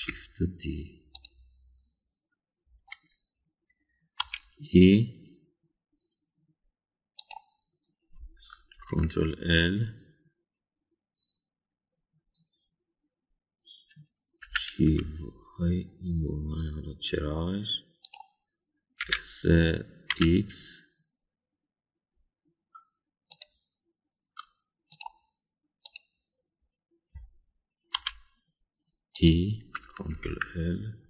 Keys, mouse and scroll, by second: 0.9 shift+d, 5.2 e, 9.7 ctrl+l, 15.4 g, 20.0 s, 26.8 click, 28.9 e.